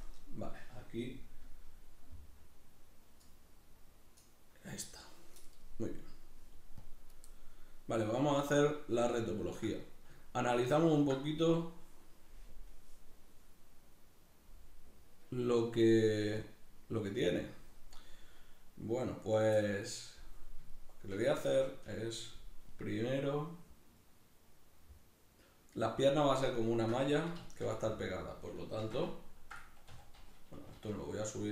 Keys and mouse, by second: 8.6-31.5 middle drag, 28.8 shift+c, 29.9 a.